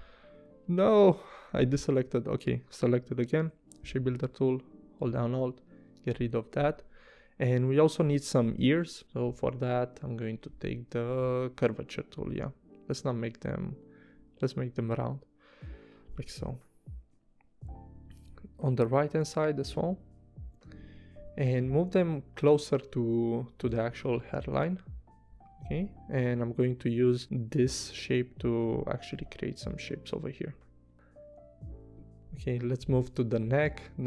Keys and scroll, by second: 0.8 v, 3.4 shift+m, 5.3 space, 20.7 v, 27.8 p, 30.5 v, 31.6 v.